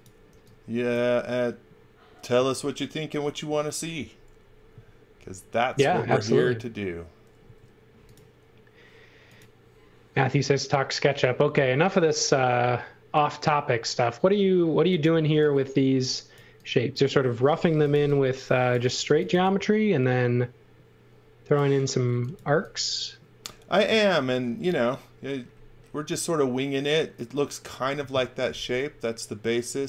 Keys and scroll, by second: 0.3 e, 7.4 a, 15.3 e, 17.4-19.8 typing, 22.1 x, 22.4 v, 24.2 x.